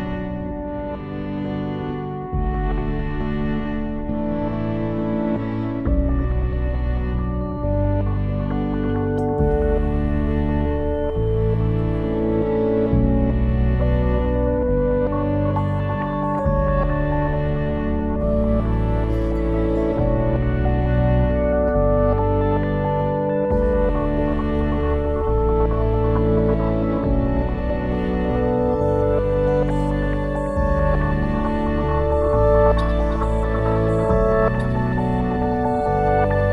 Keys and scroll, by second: 20.4 ctrl+s.